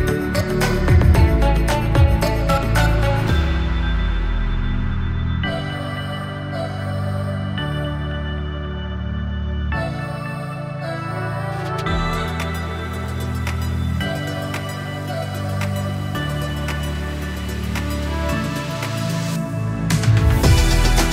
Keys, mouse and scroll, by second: 0.0-2.0 typing, 3.5-7.0 typing, 4.8 click, 5.9 ctrl+space, 8.4-9.7 typing, 9.9 click, 13.5-16.3 drag, 18.7 ctrl+s, 19.8 space.